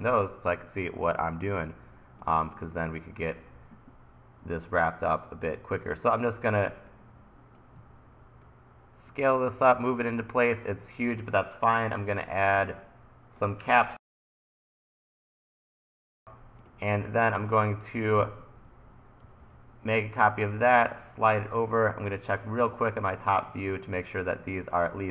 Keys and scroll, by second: 7.8 e, 18.2 e, 19.2 super+c, 19.4 super+v.